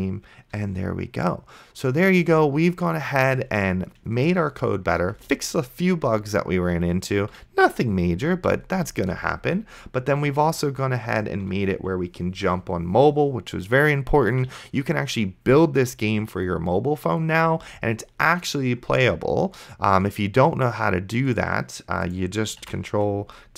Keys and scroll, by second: 0.8 d, 2.4 space, 5.3 a, 6.4-9.0 typing, 13.0 d, 14.0 space, 14.5 a, 14.9 d, 16.2 space, 22.9 ctrl+`.